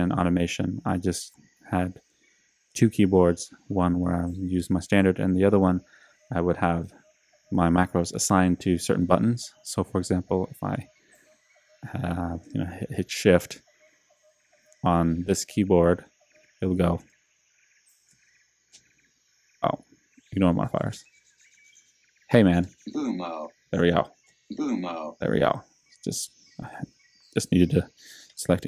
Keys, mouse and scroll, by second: 16.2 click, 20.2 click.